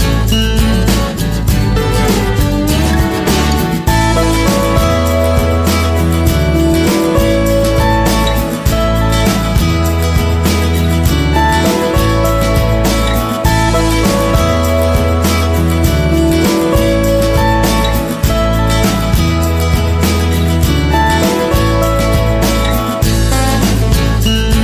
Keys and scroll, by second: 7.5 p, 17.0 p, 23.1 Right, 24.4 Down.